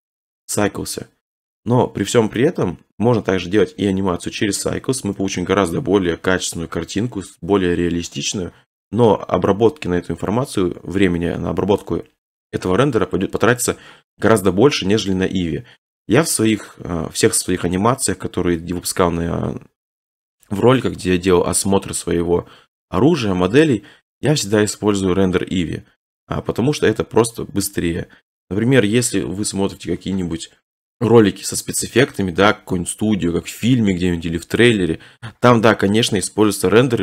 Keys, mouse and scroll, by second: 2.7 middle click, 2.8 middle click, 3.0 middle click, 3.1 middle click, 5.0 shift+middle click, 18.5-20.6 drag, 24.3 middle click, 24.3 middle click, 24.4 middle click, 25.6 middle click, 25.7 middle click, 28.7 middle click.